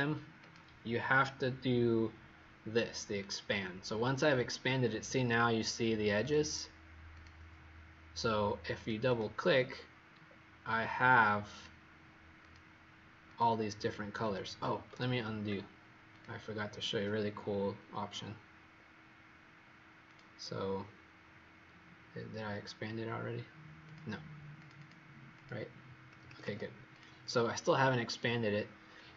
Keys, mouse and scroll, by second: 0.4 click, 3.1 click, 9.0 click, 10.2-11.5 alt+scroll down 1, 11.5 click, 13.7 click, 14.1 click, 15.0 ctrl+z, 16.0 click, 24.7 click, 25.3 click, 26.0 Escape, 26.2 Escape, 26.4 Escape, 27.0 click.